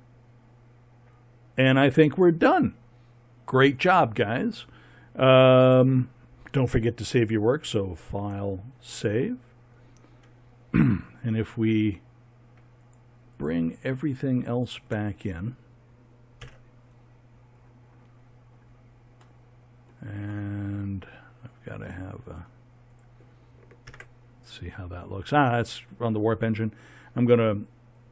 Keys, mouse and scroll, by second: 0.1-0.6 middle drag, 2.2-10.1 middle drag, 16.4 KP_1, 17.3 middle click, 22.2-22.9 middle drag, 22.9 right click, 23.9 ctrl+KP_0.